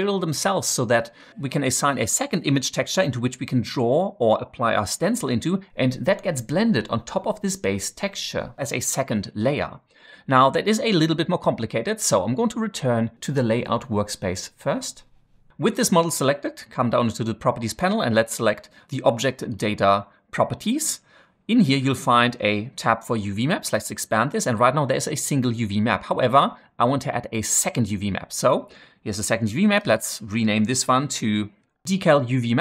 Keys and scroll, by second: 31.5-32.6 typing.